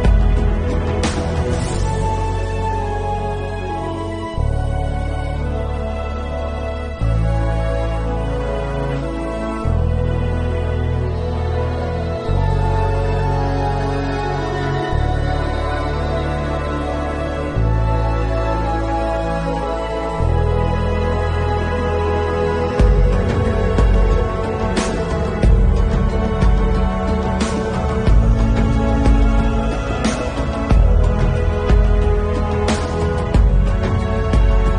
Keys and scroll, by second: 1.0 ], 1.1 [, 2.3 ctrl+alt+z, 4.5 [, 16.2 ctrl+s, 16.9 ctrl+alt+z, 17.5 ctrl+alt+z, 18.6 ctrl+s, 19.0 ], 19.9 [, 22.2 ctrl+alt+z, 22.4 7, 25.3 ctrl+alt+z, 25.6 7, 25.7 8, 30.0 ctrl+s, 32.1 ctrl+alt+z, 33.9 ctrl+alt+z.